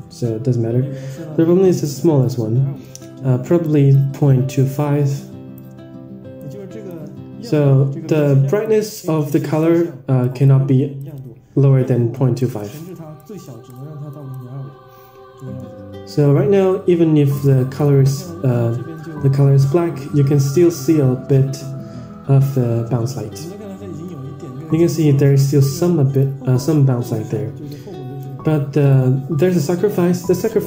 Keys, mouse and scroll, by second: 3.6 drag, 4.5 click, 6.3-6.9 drag, 8.1 click, 9.1-9.7 drag, 10.2 drag, 10.9 click, 12.1 click, 12.4 click, 13.1-13.4 drag, 13.6 click, 14.0 drag, 15.3 middle click, 17.9 click, 20.1-20.6 scroll down 1, 26.1 click, 26.4 click, 27.6 click, 28.7 drag.